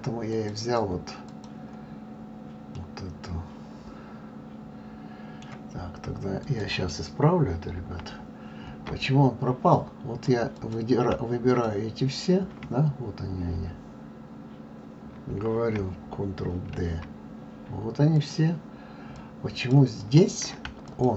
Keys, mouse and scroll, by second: 0.3 click, 1.3 click, 2.7-5.8 middle drag, 6.4 click, 7.8 Delete, 9.0-9.7 scroll down 1, 9.7 drag, 10.5 click, 11.5 shift+click, 16.7 shift+d, 19.1 click, 20.0 click, 20.9 shift+click.